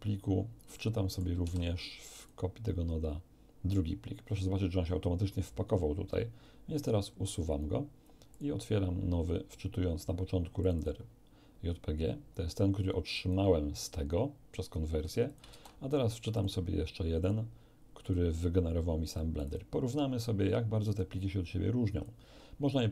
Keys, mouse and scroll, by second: 0.0 scroll down 1, 0.7 middle click, 1.4 shift+d, 2.2 shift+click, 7.4 click, 8.3 click, 10.6 click, 12.4 click, 13.8 click, 15.2 shift+click, 15.5 shift+d, 16.3 shift+click, 17.2 click, 18.0 click, 19.1 click, 21.0-22.2 drag.